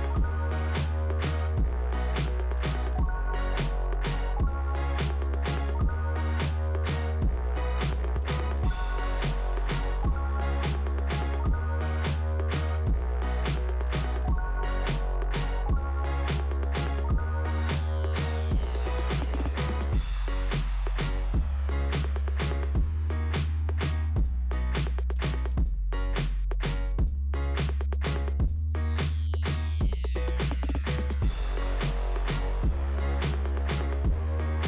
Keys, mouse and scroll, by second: 1.1 click, 5.0 scroll up 3, 6.4 click, 6.7 click, 6.8 double click, 7.6 double click, 8.7 click, 10.8 right click, 11.7 click, 11.8 click, 13.1 click, 14.0 click, 14.2 click, 16.7 scroll down 2, 17.4 right click, 18.5 click, 20.2 click, 23.0 click, 26.1 click, 28.0 click, 30.0 click, 32.9 middle click.